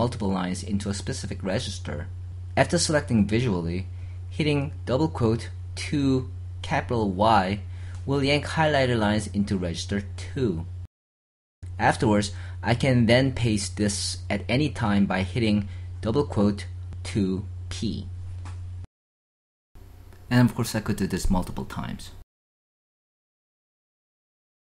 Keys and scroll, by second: 4.2-4.9 typing, 15.9 p.